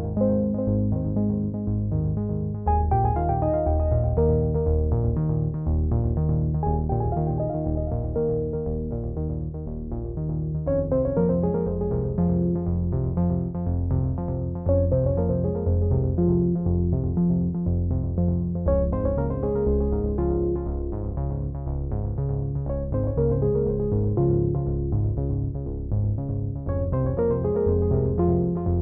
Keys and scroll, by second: 23.1 ctrl+j.